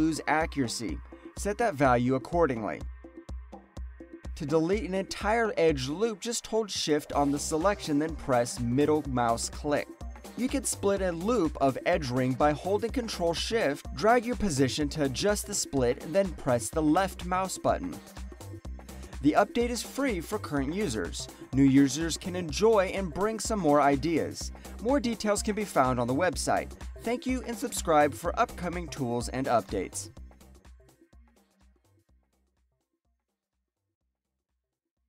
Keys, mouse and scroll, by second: 3.7 click, 4.9 alt+right click, 5.2 alt+middle click, 6.2 shift+middle click, 7.1 alt+right click, 7.5 alt+click, 8.3 shift+middle click, 8.9 alt+click, 9.0 alt+right click, 9.4 alt+middle click, 11.2 alt+middle click, 11.5 alt+click, 13.0 ctrl+shift+click, 14.3 ctrl+shift+click, 15.8 ctrl+shift+click, 16.2 alt+click, 16.3 alt+right click, 17.2 ctrl+shift+click, 17.7 alt+middle click, 18.2 alt+click, 18.4 alt+right click.